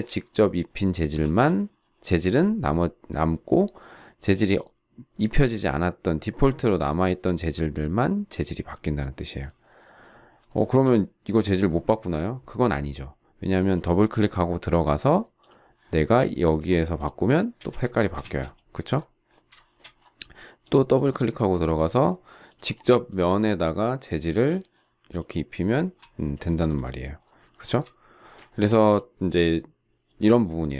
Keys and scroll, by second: 1.2 space, 18.1 space, 26.0 space.